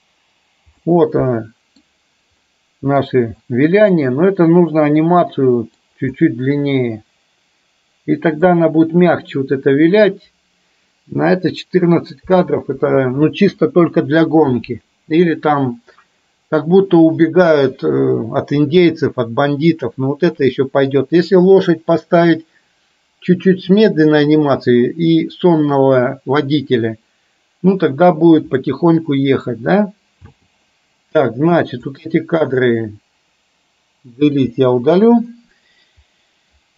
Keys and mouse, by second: 0.9-1.9 middle drag, 2.5-3.0 middle drag, 3.5-5.9 middle drag, 6.3-8.5 middle drag, 28.8-29.5 middle drag, 30.4 space, 31.9-32.6 drag, 34.5 Delete.